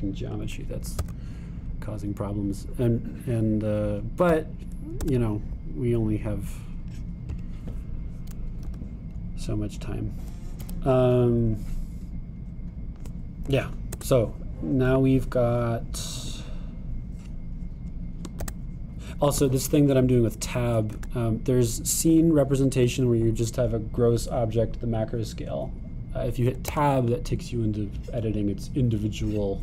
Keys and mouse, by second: 1.0-4.3 middle drag, 2.0 Tab, 4.3-8.4 drag, 5.3 g, 9.7 g, 15.0 Tab, 17.3-29.6 drag, 19.4 Tab, 22.0 Tab, 27.7 Tab.